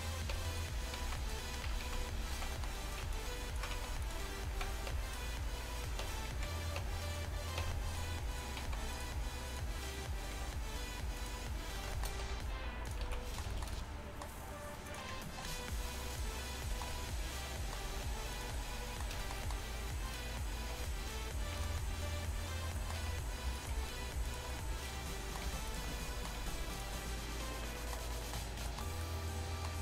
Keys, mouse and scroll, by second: 0.4 Tab, 1.0 z, 1.7 Tab, 1.9 z, 2.4 z, 2.7 click, 3.8 x, 4.6 z, 5.0 Tab, 6.1 Tab, 6.4 z, 6.9 Tab, 7.7 Tab, 8.7 x, 10.4 g, 12.3 r, 12.9 g, 13.1 z, 15.3 shift+s, 17.9 g, 20.8 r, 23.1 r, 23.8 g, 25.7 g, 26.6 g.